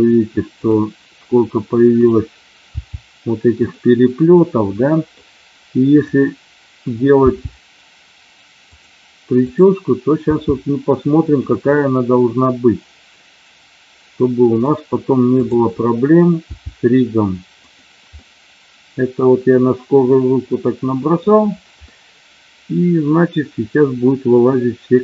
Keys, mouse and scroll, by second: 2.0 click, 2.7 g, 3.6 click, 4.4 middle click, 5.9 click, 7.0 g, 8.7 click, 9.3 click, 11.2 click, 11.8-14.6 middle drag, 15.3 click, 16.4 g, 17.5 click, 18.0-21.2 middle drag, 18.0-19.1 scroll up 1, 21.9-25.0 middle drag.